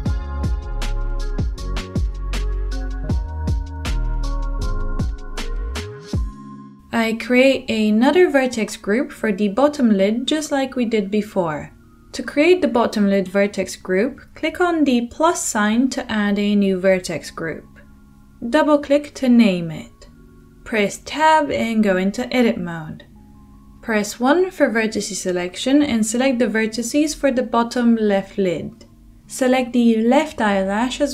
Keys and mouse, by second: 0.8 Tab, 1.0-2.4 middle drag, 2.4-4.8 drag, 4.8 middle click, 5.6-18.9 drag, 18.9 middle click, 19.0-29.3 drag, 21.2 t, 21.7 Tab, 29.3-30.3 shift+middle drag, 30.3-31.1 drag.